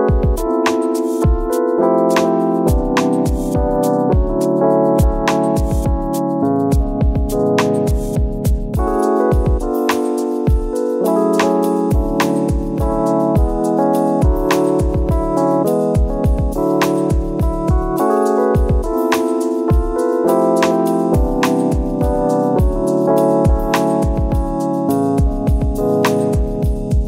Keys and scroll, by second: 3.3 ctrl+z, 6.7 space, 9.9 space, 10.8 ctrl+z, 15.4 ctrl+-, 15.8 space, 17.0 ctrl+z, 23.1 ctrl++, 23.3 space, 23.9 space, 25.9 space.